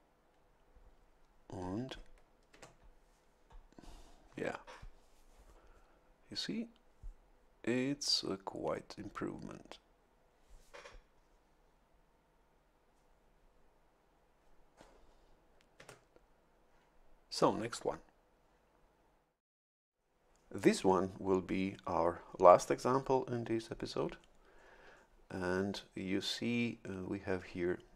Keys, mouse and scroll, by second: 2.5 Tab, 15.7 Tab.